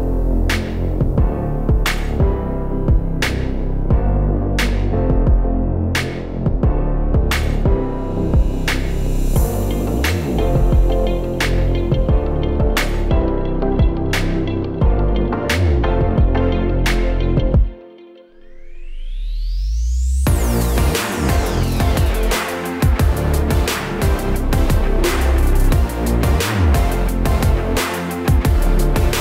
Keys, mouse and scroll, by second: 0.2 click, 0.7 click, 1.1 shift+a, 4.9 d, 5.7 s, 6.8 click, 8.4 ctrl+z, 8.9 click, 11.6 KP_0, 13.0 click, 13.6 click, 14.5 click, 18.0 click, 18.6 click, 19.7 click, 25.5 right click, 26.0 right click, 26.7 click, 28.9 middle click.